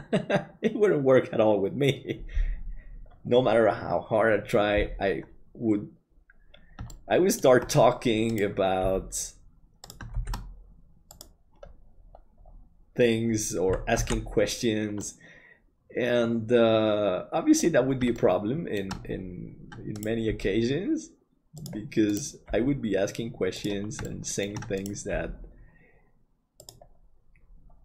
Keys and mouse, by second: 6.9 shift+middle click, 8.8 g, 10.2 shift+d, 14.1 alt+a, 15.0-17.6 middle drag, 18.1 shift+middle click, 20.3 g, 22.5 g, 24.1 middle click, 26.7 g.